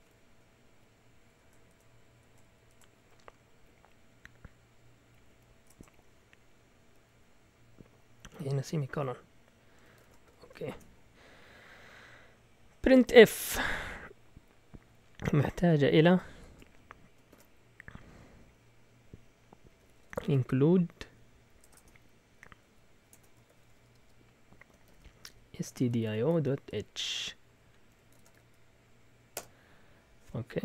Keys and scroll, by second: 0.4 Down, 0.6 Down, 1.3-5.7 typing, 3.6 Left, 4.2 Left, 6.8-11.2 typing, 13.4 Return, 14.2 Up, 14.8 Up, 14.9 Up, 16.3 0, 17.3 shift+3, 19.6-28.7 typing, 29.3 Return.